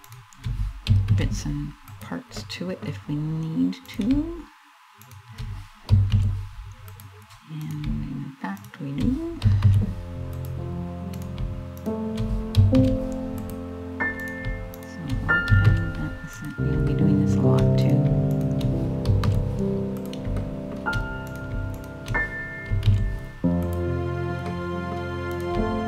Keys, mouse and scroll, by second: 0.6 alt+m, 2.0 middle click, 2.8 middle click, 3.5 right click, 4.7 shift+right click, 5.7 alt+m, 7.3 right click, 8.2 shift+right click, 9.3 alt+m, 10.8 right click, 11.5 shift+right click, 12.5 alt+m, 13.9 right click, 14.4 shift+right click, 15.3 alt+m, 16.5 shift+middle click, 17.5 right click, 18.0 shift+right click, 18.8 alt+m, 20.0 shift+middle click, 20.9 right click, 21.4 shift+right click, 22.5 alt+m, 24.1 middle click, 24.9 right click, 25.5 shift+right click.